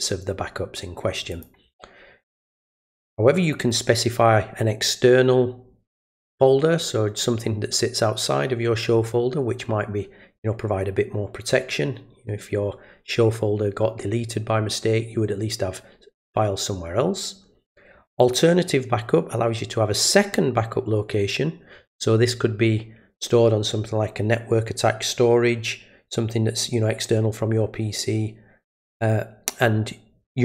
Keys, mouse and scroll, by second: 1.3 click, 18.2 click.